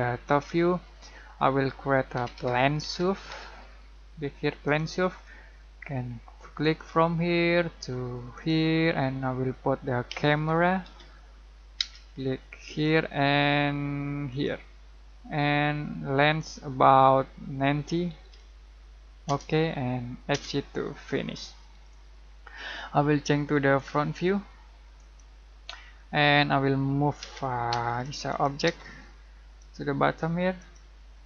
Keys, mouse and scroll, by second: 0.8-1.1 scroll down 1, 1.4 middle click, 1.9-3.3 typing, 4.6 click, 8.8 scroll down 1, 9.0 middle click, 10.1-11.7 typing, 12.7 click, 17.8-18.7 typing, 19.2 Return, 21.8-23.7 middle drag, 23.7 click, 25.9 middle click, 26.3-27.2 scroll up 1, 27.2 m, 27.7 space, 28.0 click, 28.6 space, 28.9-29.6 scroll up 1, 29.6 click, 31.1-31.2 scroll down 1.